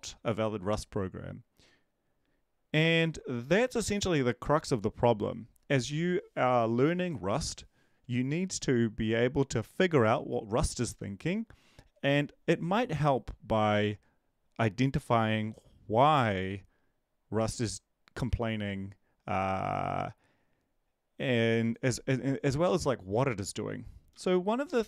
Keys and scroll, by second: 22.6 Up, 24.1 End, 24.7 Down.